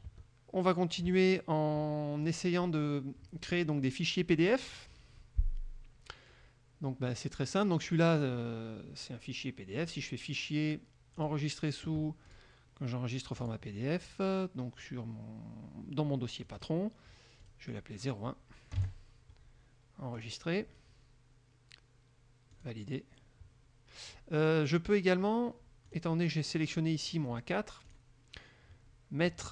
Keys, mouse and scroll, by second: 0.3 alt+Tab, 2.5 click, 4.9 click, 7.3 click, 8.0-10.0 middle drag, 8.0-8.5 scroll down 1, 8.5-10.0 scroll down 1, 10.0 click, 11.3 click, 12.5 click, 13.6 click, 16.6 click, 17.6 click, 18.9 KP_0, 19.3 KP_1, 20.3 click, 22.7 click, 26.0 click, 26.7 click, 28.0 click.